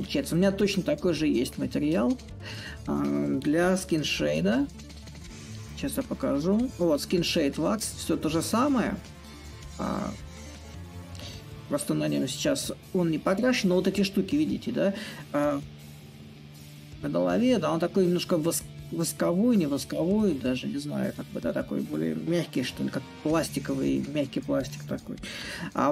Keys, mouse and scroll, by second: 0.0 right click, 3.3 a, 19.6-24.6 right drag, 25.1 a.